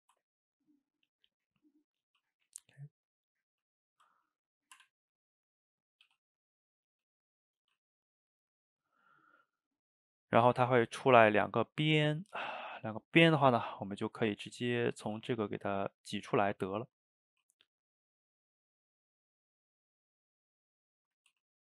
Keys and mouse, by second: 4.8 Tab, 5.4-5.8 middle drag, 5.8 click, 6.1 g, 6.8 click, 6.9 g, 7.5 click, 7.7 g, 8.2-14.5 middle drag, 14.5 click, 15.1 Tab, 15.5 click, 16.4 middle click, 17.3 ctrl+r, 21.3 Tab.